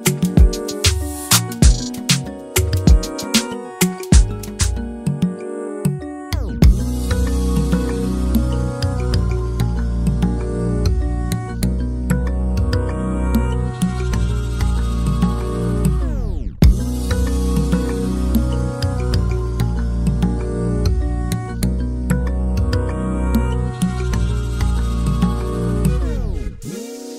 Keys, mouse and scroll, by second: 4.7 scroll down 2, 4.8 middle click, 5.1 scroll up 1, 5.2 middle click, 7.2 click, 7.8 alt+a, 7.8 scroll down 1, 8.0 scroll up 3, 8.0 middle click, 8.3 z, 8.6 click, 8.6 scroll down 2, 8.7 shift+middle click, 9.3 scroll up 7, 9.4 scroll down 1, 9.6 alt+a, 9.7 shift+middle click, 10.0 scroll down 1, 10.1 shift+middle click, 10.2 scroll up 1, 10.3 middle click, 10.4 click, 11.3-12.6 drag, 12.6 l, 13.1 click, 13.7 alt+a, 13.9-15.0 middle drag, 15.2 scroll down 2, 15.3-15.7 scroll up 2, 15.4 middle drag, 15.7 middle drag, 15.9 scroll down 1, 16.0 click, 16.8 click, 18.7 scroll up 2, 18.8 shift+middle click, 19.0 middle click, 19.2 click, 19.3 shift+middle click, 20.2 Tab, 20.6 Tab, 20.8 alt+a, 20.9 scroll down 1, 21.0 scroll up 1, 21.1 middle click, 21.5 scroll down 1, 21.7 click, 22.5 click, 22.7-23.8 middle drag, 23.8-24.9 drag, 25.1 middle click, 25.2-25.6 scroll up 2, 25.7-26.7 shift+right drag, 26.7 scroll down 10, 26.9 click.